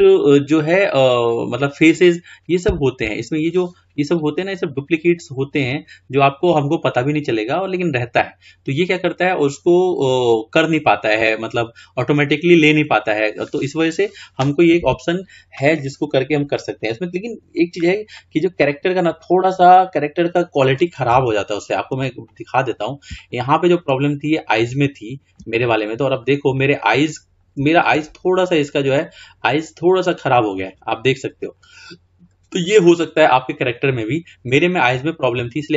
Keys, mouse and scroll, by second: 0.1 Tab, 0.9 click, 3.5-5.2 scroll up 2, 5.2-8.0 scroll down 4, 12.3-14.9 scroll down 2, 14.9 Tab, 15.8-16.4 scroll up 3, 16.4-16.9 scroll down 2, 16.9-18.3 scroll up 5, 18.3-19.9 middle drag, 19.9-21.4 scroll up 1, 21.4-24.2 shift+middle drag, 24.2-24.5 scroll up 3, 24.9-27.6 shift+middle drag, 27.6 scroll down 1, 27.7-28.4 shift+scroll up 5, 30.0-33.5 middle drag, 33.5 scroll down 3, 35.0 scroll up 2, 35.2-35.7 scroll down 2.